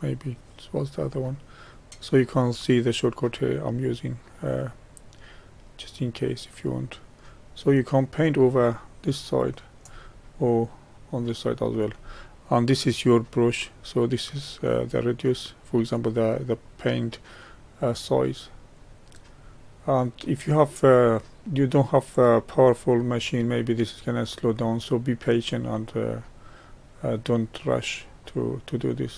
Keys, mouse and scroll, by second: 0.9 n, 3.9-6.9 drag, 10.4-13.4 drag, 14.0-17.0 drag, 18.1-21.1 drag.